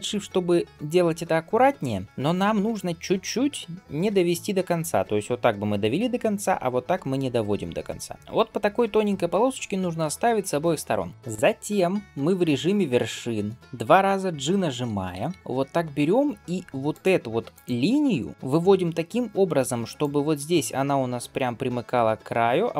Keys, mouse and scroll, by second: 13.6 click, 17.5 alt+click, 19.8-22.7 drag.